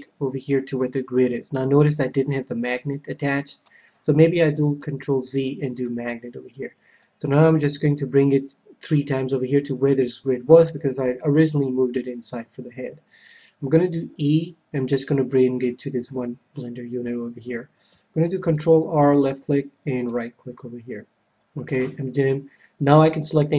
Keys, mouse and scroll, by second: 4.7 ctrl+z, 5.7-8.6 drag, 13.9 e, 15.8-17.4 drag, 18.3 ctrl+r, 20.1-21.8 right drag.